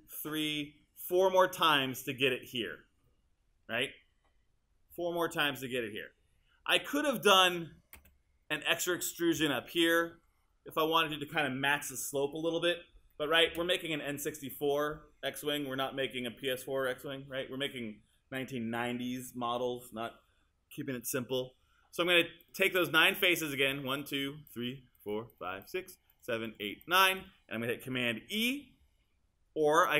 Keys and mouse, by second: 8.0 space, 9.5 click, 13.5 space, 22.4 click, 24.6 shift+click, 25.3 shift+click.